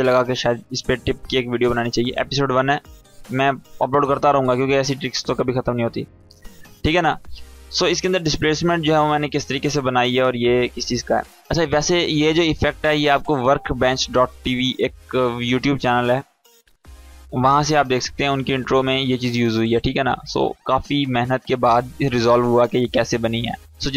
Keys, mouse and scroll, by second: 11.2 space, 12.5-13.1 drag.